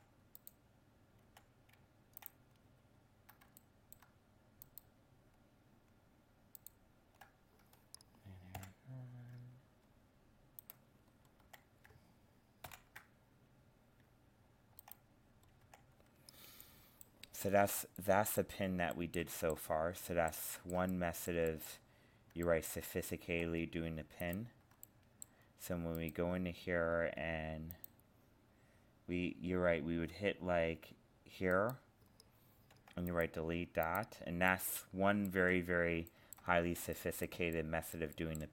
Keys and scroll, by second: 8.5 ctrl+j, 12.7 ctrl+n.